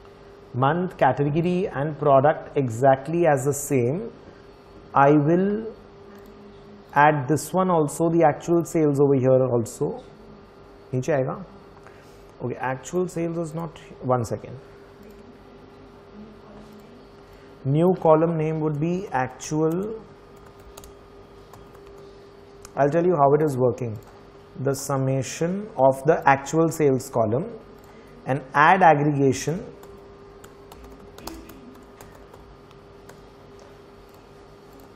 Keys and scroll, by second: 18.3-22.3 typing, 29.1-33.6 typing.